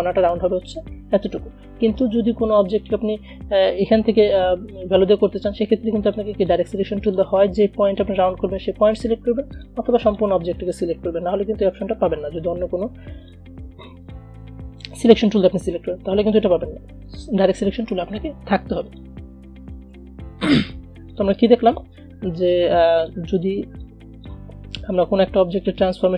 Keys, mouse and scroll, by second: 6.3 click, 9.7 click, 13.4 click, 17.7 a, 19.0 click, 20.6 Delete, 21.2 click, 21.5 Delete, 22.6 click, 24.0-26.1 shift+drag.